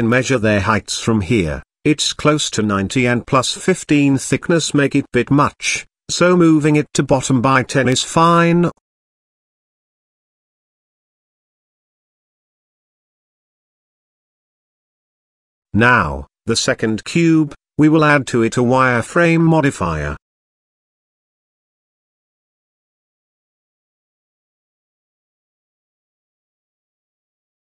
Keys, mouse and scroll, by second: 0.4 click, 1.5-4.3 drag, 5.1 click, 6.1 g, 12.1 middle click, 12.9 shift+middle drag, 13.3-13.6 middle drag, 13.7-14.2 shift+middle drag, 14.6 click, 17.6 click, 18.4-20.0 drag, 20.5 middle click, 20.8 z, 21.8-22.5 shift+middle drag, 24.4-25.7 drag, 26.2-26.8 middle drag, 26.9-27.3 shift+middle drag, 27.4-27.6 middle drag.